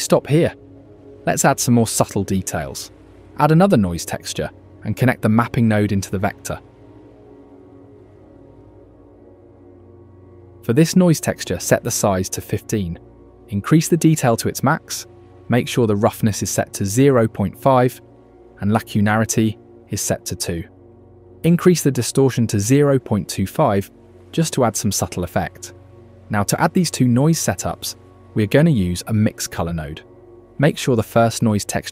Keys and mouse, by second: 0.7 shift+a, 5.0-6.7 drag, 8.1 ctrl+shift+click, 10.2 click, 11.6-12.7 drag, 13.9 click, 21.8-23.2 drag, 24.9 click, 26.9 shift+a.